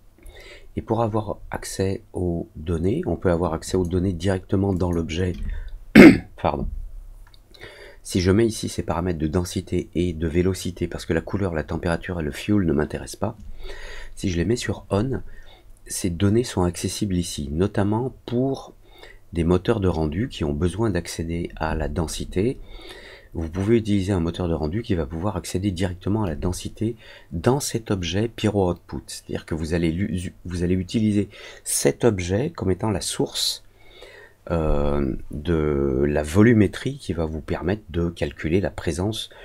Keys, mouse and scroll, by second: 3.6 click, 4.7 click.